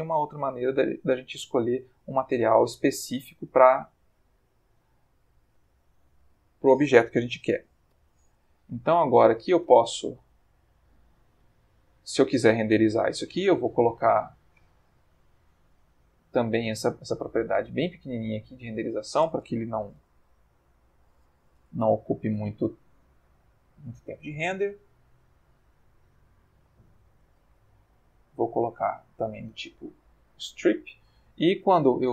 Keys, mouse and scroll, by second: 0.7-1.7 middle drag, 3.0 click, 4.2 click, 5.5 g, 6.4 Escape, 7.9 r, 8.2 x, 9.3 click, 9.7 g, 11.0 click, 11.4 g, 12.1 click, 13.6 ctrl+s, 14.5 Escape, 16.0 click, 17.1 click, 18.1 click, 18.8 click, 19.8 3, 19.9 9, 21.0 BackSpace, 21.5 0, 21.8 Return, 24.1 click, 25.2 click, 27.9 click, 28.7 click, 30.0-30.9 ctrl+middle drag, 31.8 F12.